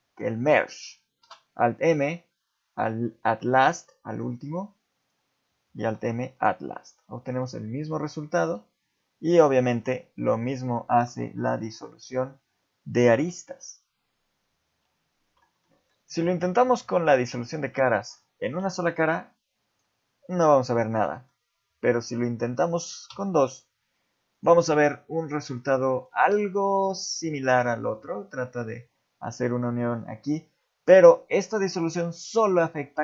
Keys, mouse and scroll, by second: 0.3 shift+middle click, 1.2 alt+m, 4.3 click, 5.0 shift+click, 5.9 alt+m, 7.0 middle click, 7.4 z, 7.9 middle click, 9.6 ctrl+z, 9.8 ctrl+z, 10.2 ctrl+z, 10.6 ctrl+z, 11.7 shift+click, 13.2 x, 15.6 middle click, 16.4 ctrl+Tab, 17.5 click, 17.9 shift+middle click, 18.6 x, 21.0 middle click, 21.8 shift+click, 23.1 x, 24.9 middle click, 26.2 z, 26.6 middle click, 27.9 z, 30.0 middle click, 30.6 middle click, 31.4 middle click, 32.9 middle click.